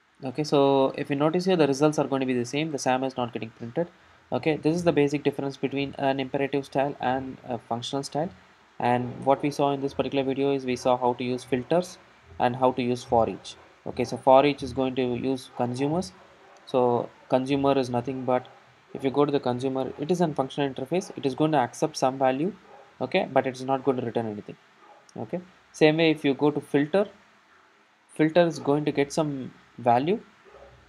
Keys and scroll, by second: 17.0 super+b, 22.2 super+b, 28.4 super+b.